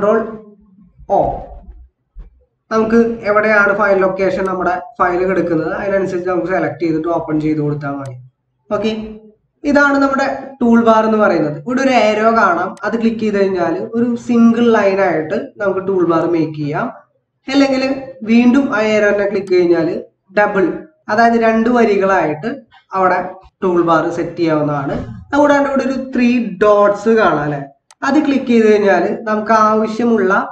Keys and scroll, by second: 1.0 ctrl+o.